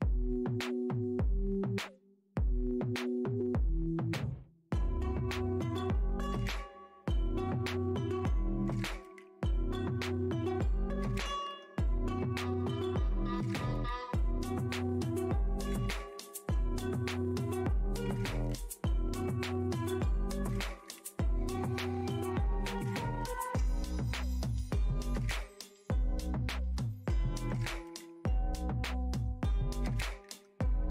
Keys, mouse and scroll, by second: 1.5 click, 1.6 scroll down 1, 2.6 click, 3.4 scroll, 3.4-4.1 scroll up 1, 4.1 click, 6.2 click, 6.3 Tab, 8.8 click, 14.2 click, 15.3 Tab, 18.3 ctrl+Tab, 19.1 ctrl+Tab, 19.6 click, 19.7 Tab, 21.3 right click, 22.1 click, 23.0 click, 23.8 click, 25.3 Tab, 25.3 click, 25.9 click, 26.3 click, 27.4 click, 27.5 Tab, 30.0 Tab.